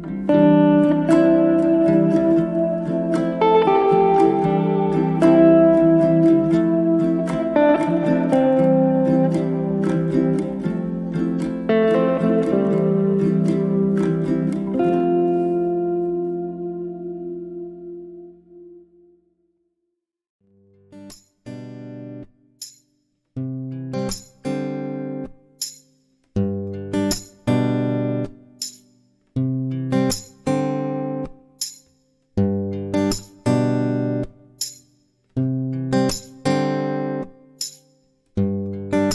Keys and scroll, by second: 15.7 space, 26.3 space, 32.5 space.